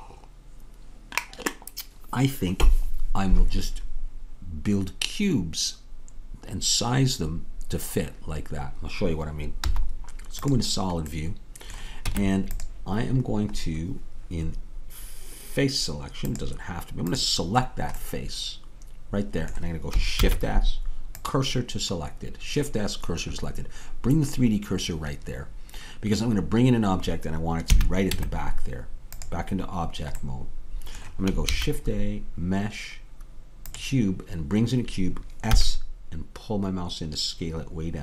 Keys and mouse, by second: 9.7 z, 12.1 Tab, 16.4-20.3 drag, 20.3 shift+s, 27.8 a, 28.2 Tab, 31.5 shift+a, 35.6 s.